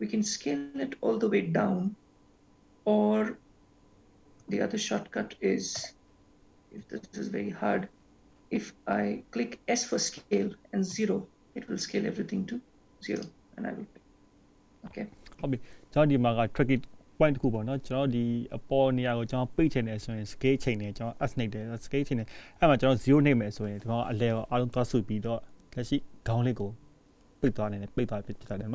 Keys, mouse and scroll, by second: 7.1 s, 16.4-18.0 scroll down 6, 18.0-19.2 scroll up 7, 19.2-19.6 scroll down 2, 19.7 shift+middle click, 20.8 scroll up 1, 23.1-24.2 scroll up 2, 24.2-25.0 scroll up 2.